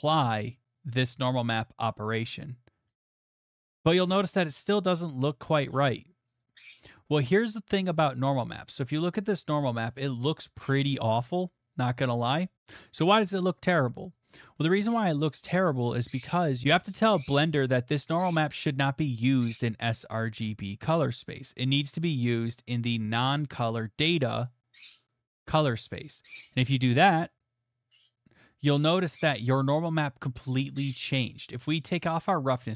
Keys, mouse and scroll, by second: 3.5 middle click, 8.3 middle click, 8.6 middle click, 8.6 scroll, 9.1 middle click, 9.4 shift+middle click, 9.9 middle click, 11.1 middle click, 11.2 middle click, 11.8 middle click, 12.5 click, 22.7 click, 25.9 click, 27.3 click, 30.3 middle click, 30.9 middle click, 31.9 middle click.